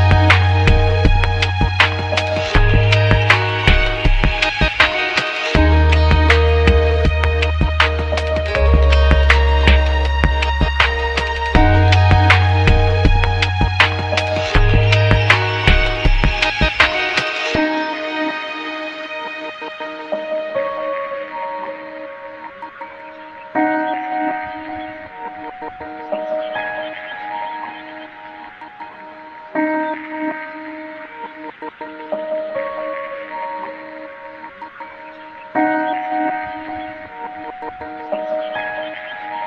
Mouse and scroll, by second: 34.7 click.